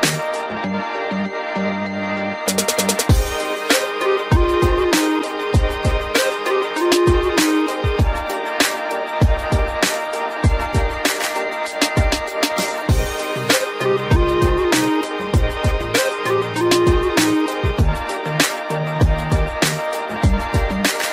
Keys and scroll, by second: 3.0 ctrl+0, 6.6 ctrl+g, 7.5 ctrl+alt+shift+e, 11.5 ctrl+s.